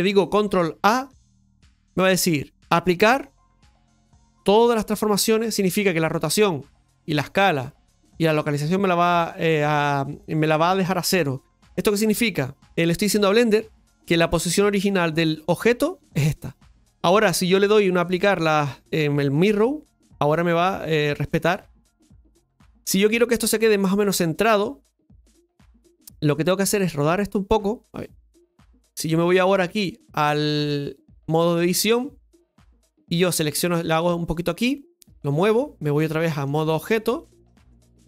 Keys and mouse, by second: 19.4 click, 21.7 middle click, 26.9-27.9 drag, 29.7 ctrl+z, 29.7-31.3 drag, 33.2-38.0 drag.